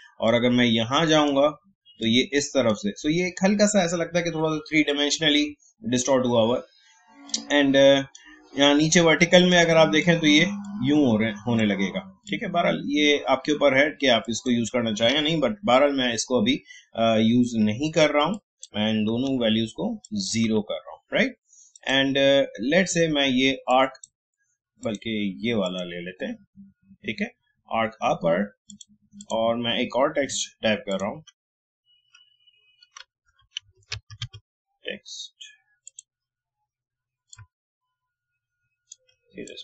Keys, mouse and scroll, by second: 0.2-5.3 drag, 7.3-14.2 drag, 15.9 Tab, 18.3 click, 19.2 0, 20.0 click, 20.4 0, 21.7 click, 28.7 click, 30.2 t, 30.9 click, 33.2 shift+t, 33.6 e, 35.8-39.4 drag, 39.4-39.6 drag.